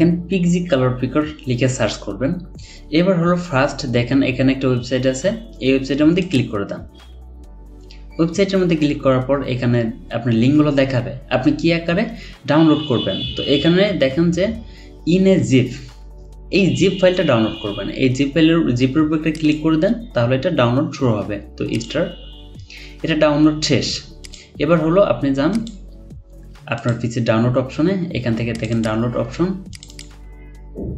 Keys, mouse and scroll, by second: 3.8 scroll down 1, 28.7 double click, 29.9 double click.